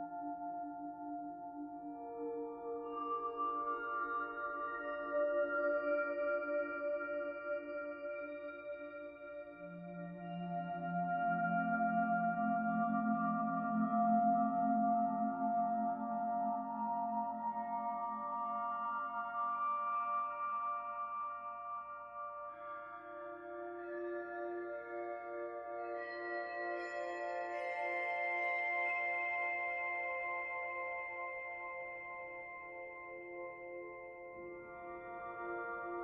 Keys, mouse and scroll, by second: 0.8 ctrl+a, 3.9 middle click, 4.8 click, 7.3 ctrl+a, 9.1 middle click, 10.3 middle click, 11.7 a, 12.2 middle click, 13.9 ctrl+a, 18.0 middle click, 19.0 click, 19.5 middle click, 21.0 ctrl+a, 22.0 click, 22.5 click, 24.8 click, 25.2 middle click, 26.0 ctrl+a, 27.9 middle click, 28.8 click, 29.0 middle click, 29.8 click, 30.9 middle click, 31.9 middle click, 32.9 ctrl+a, 34.3 middle click, 35.2 middle click.